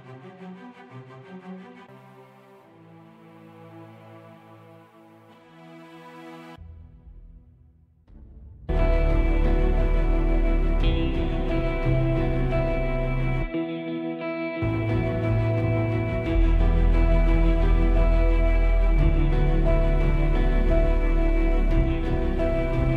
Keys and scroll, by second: 18.7 super+=, 19.9 super+=, 21.2 super+=.